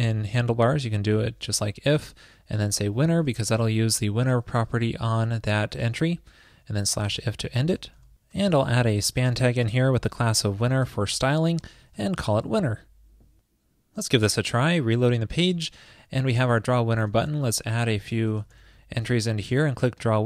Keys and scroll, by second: 3.6 alt+shift+Left, 4.6 super+Right, 7.5 super+Right, 8.4 ctrl+shift+<, 12.6 Escape.